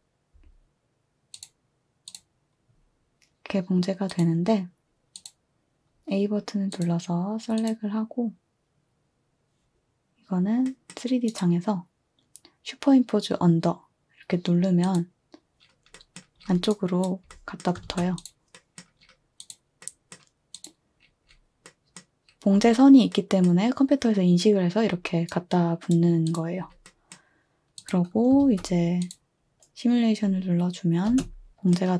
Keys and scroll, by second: 17.8 a, 28.4 a, 31.1 space.